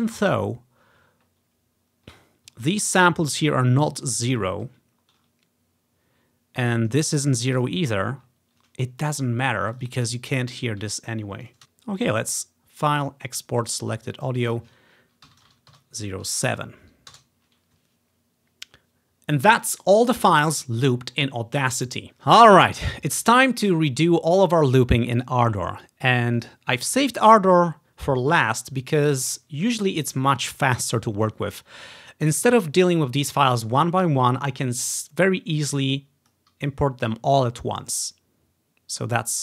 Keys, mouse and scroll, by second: 2.7 scroll up 2, 3.7-5.8 scroll down 5, 5.8-7.0 scroll up 3, 8.1-8.4 ctrl+scroll down 3, 9.8 click, 9.9 click, 10.4 scroll up 1, 11.5 click, 12.1 click, 13.7 click, 15.4 typing, 15.9 Return, 17.2 Return, 26.5-27.7 drag, 35.9 click, 36.6 click, 37.6 click.